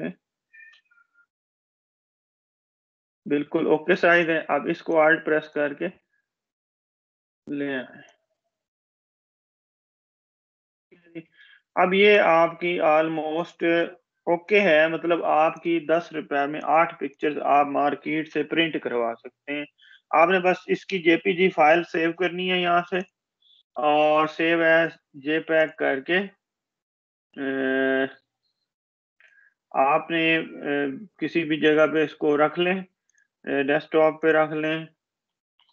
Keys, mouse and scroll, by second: 14.3 Down, 15.1 click, 17.9 ctrl+=, 24.4 click, 29.0 click, 31.8-32.3 scroll up 1, 34.8 click.